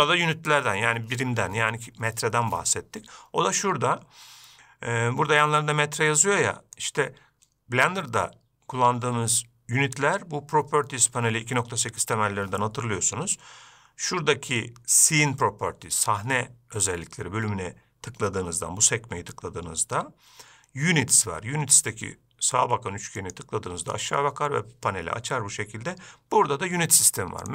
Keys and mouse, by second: 23.6 click.